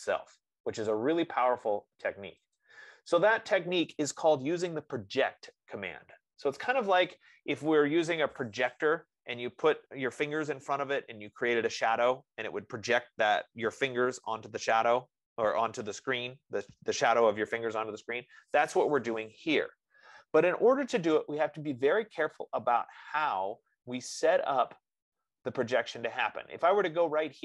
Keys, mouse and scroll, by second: 3.0 click, 5.8-7.9 drag, 21.6 F15.